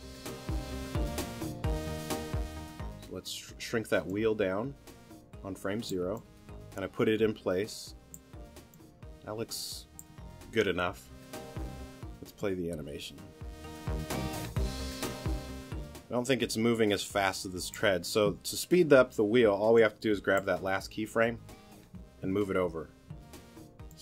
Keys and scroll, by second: 23.1 t.